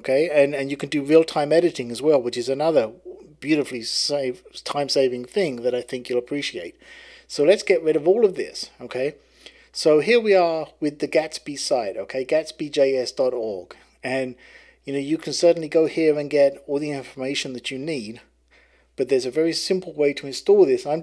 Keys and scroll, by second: 7.4 super+h.